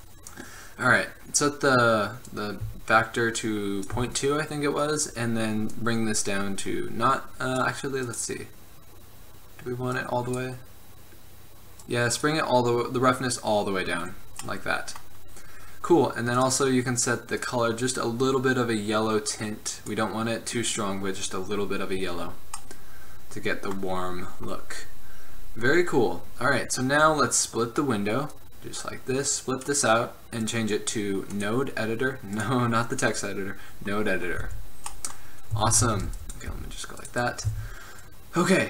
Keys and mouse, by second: 2.4-4.3 drag, 4.8-5.8 middle drag, 5.8-7.6 drag, 8.1-9.9 drag, 9.9 middle click, 10.1-13.8 drag, 13.8-17.3 middle drag, 17.3-19.9 drag, 22.7-27.0 middle drag, 28.4 click, 34.5 n, 35.9 a, 36.2 b, 36.5-37.1 middle drag, 36.7 g, 37.6 a.